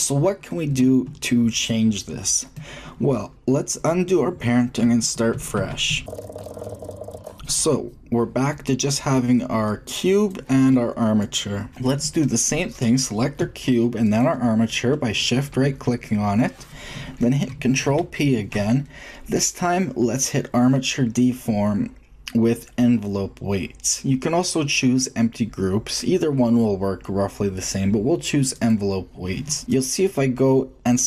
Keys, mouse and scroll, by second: 5.3 ctrl+z, 5.5-7.1 ctrl+z, 8.9-11.2 drag, 11.2-11.5 middle drag, 11.4-12.6 drag, 13.4-16.0 shift+drag, 16.6 middle click, 17.8 ctrl+p, 21.9-29.6 middle drag, 29.6-31.0 drag.